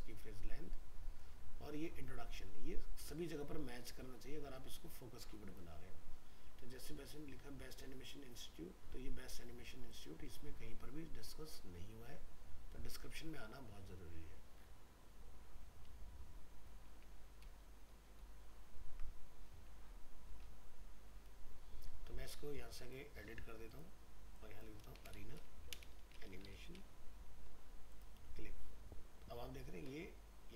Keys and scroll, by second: 17.5 ctrl+Right, 18.6 ctrl+Left.